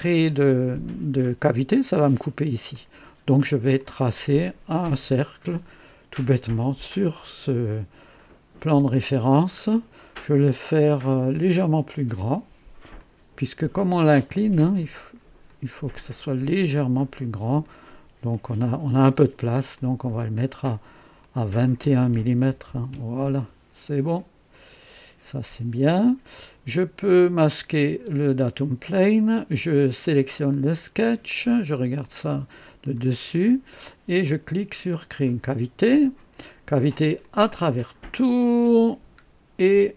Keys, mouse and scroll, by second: 2.7 click, 3.8 click, 7.0 click, 8.2-8.7 scroll up 2, 8.8 right click, 9.6 scroll up 1, 10.0 right click, 13.0 click, 15.4 click, 17.6 click, 18.3 right click, 19.7 click, 21.2 click, 22.5 KP_2, 22.6 KP_1, 22.9 Return, 24.5 click, 27.2 click, 28.0 space, 29.8 click, 30.5 click, 32.0 click, 32.8-33.2 scroll up 1, 33.3 right click, 35.2 click, 37.2 click, 37.8 click, 39.2 scroll down 1.